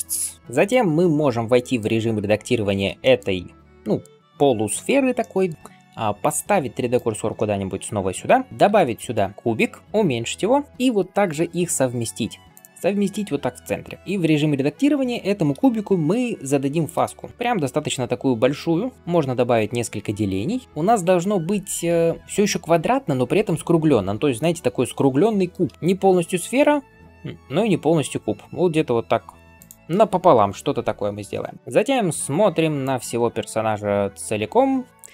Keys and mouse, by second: 2.4 Tab, 6.8 shift+right click, 6.9-35.1 shift+middle drag, 8.7 shift+a, 9.8 s, 10.7 g, 12.7 g, 14.0 Tab, 16.8 ctrl+b.